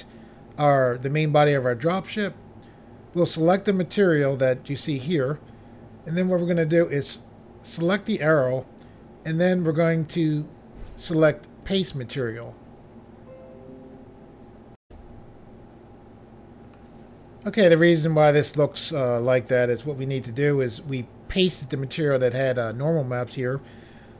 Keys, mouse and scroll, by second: 3.2 click, 3.3 click, 7.9 click, 8.0 click, 11.7 click, 11.8 click, 14.8 Insert, 16.1 Pause.